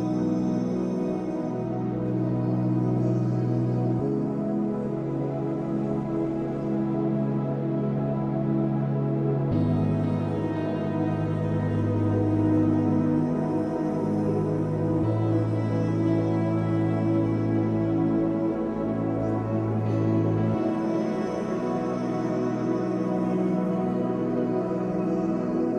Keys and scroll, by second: 11.6 space, 12.6 space, 17.2 space, 18.2 space, 21.2 space, 24.3 ctrl+d.